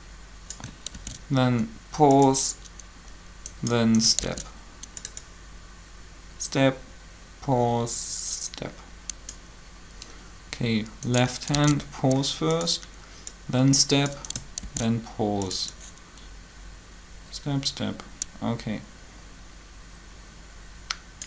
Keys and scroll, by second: 0.9 shift+d, 4.2 shift+d, 11.5 shift+d, 14.6 shift+d.